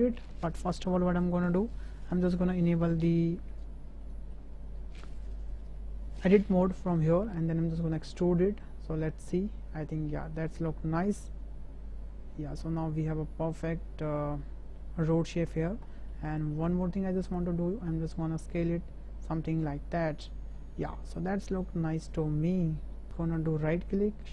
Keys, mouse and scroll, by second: 2.7 click, 4.0 shift+click, 6.9 shift+middle click, 7.9 e, 14.4 middle click, 15.9 shift+middle click, 16.3 middle click, 17.3 click, 18.5-20.5 drag, 20.7 middle click, 22.6 middle click, 23.8-24.3 drag.